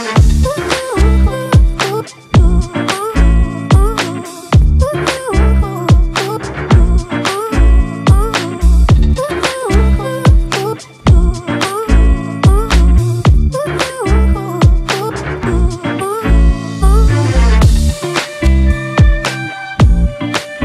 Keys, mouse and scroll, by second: 5.9 ctrl+=, 6.6 space, 11.0 ctrl+click, 12.8 ctrl+click, 14.3 double click.